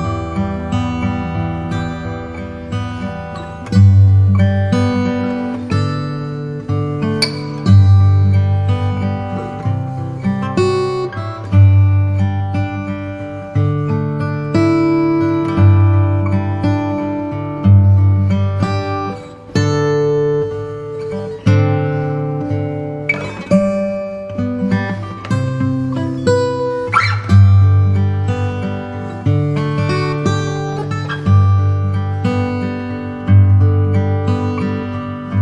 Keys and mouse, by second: 0.9-2.8 drag, 5.1-11.9 drag, 13.9 click, 16.2 s, 18.4 click, 21.7 click, 22.6 s, 24.7 click, 26.0 s, 28.4-31.9 drag, 35.0 g.